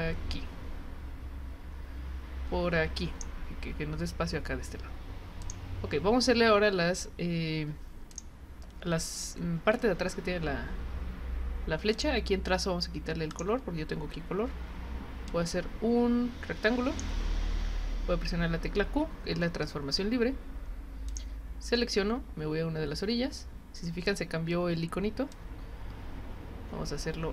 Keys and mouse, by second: 5.4 click, 8.1 click, 11.9 click, 13.3 click, 15.3-17.0 drag, 21.1 click, 25.3-27.3 drag.